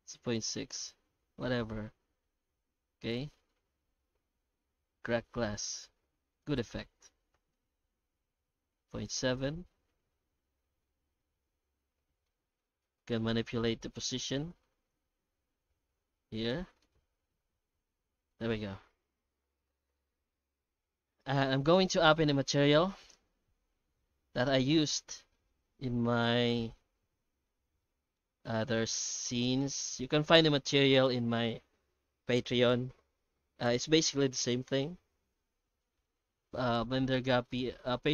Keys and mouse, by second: 1.8-3.1 middle drag, 3.6-4.7 middle drag, 4.8 middle click, 6.3-8.0 drag, 9.3-12.2 middle drag, 12.8 middle click, 14.4-16.5 shift+drag, 16.8-18.3 middle drag, 18.8 middle click, 21.6-23.0 middle drag, 23.1 ctrl+space, 24.7 middle drag, 25.3 shift+middle click, 26.7 shift+middle click, 27.9 ctrl+middle click, 29.0 shift+middle drag, 29.6 middle drag, 30.1 ctrl+space.